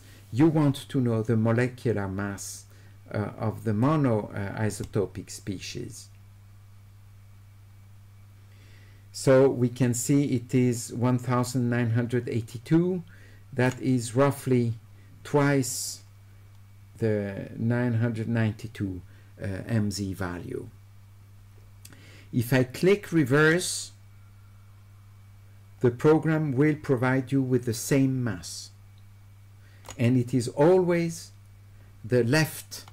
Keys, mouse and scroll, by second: 3.8-13.7 drag, 23.4-29.8 drag.